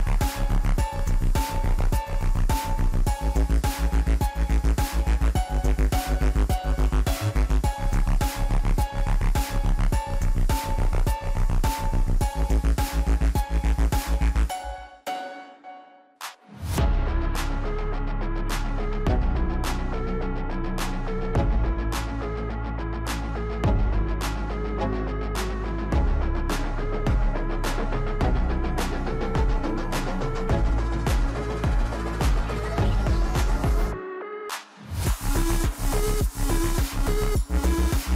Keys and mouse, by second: 0.7 click, 1.8 KP_1, 3.0-4.0 shift+middle drag, 5.0-6.4 shift+middle drag, 7.1 click, 7.7 s, 8.9 shift+middle drag, 9.5 g, 11.9 shift+middle click, 12.2 s, 13.5 s, 15.1 s, 16.1 shift+z, 17.3 shift+middle click, 17.9 shift+middle drag, 18.8 g, 22.4 Tab, 24.3 click, 26.4 x, 29.7-32.5 drag, 34.1 x.